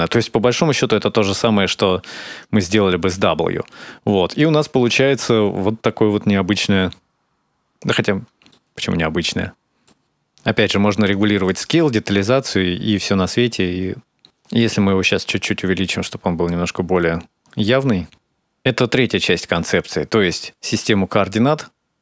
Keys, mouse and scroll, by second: 1.8-3.2 scroll down 11, 2.8 middle click, 4.1 ctrl+shift+click, 8.3 middle click, 9.9 scroll up 1, 10.1 middle click, 10.4-11.1 scroll up 5, 11.2 shift+click, 12.1 click, 12.5 click, 12.8 click, 15.2-15.7 scroll down 3, 16.0 scroll up 3, 16.1 middle click, 16.4 shift+click.